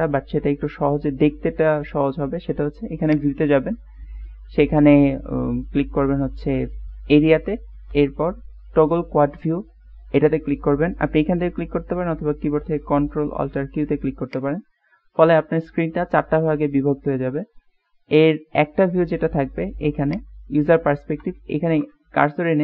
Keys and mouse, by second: 3.2 click.